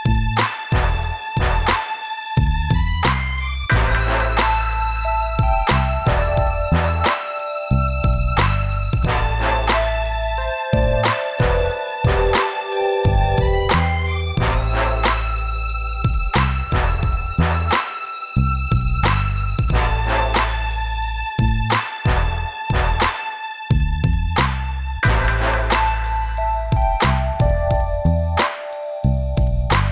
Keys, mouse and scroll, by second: 0.0 click, 2.0 click, 2.5 click, 3.1 click, 3.3 scroll down 2, 5.3 click, 5.9 scroll down 1, 6.3 click, 6.3 click, 6.4 click, 7.8 scroll down 1, 12.0 click, 14.3 click, 15.6 click, 22.7 scroll up 2, 24.6 click, 25.1 click, 25.6 click, 27.3 scroll up 2, 28.0 click, 29.0 click.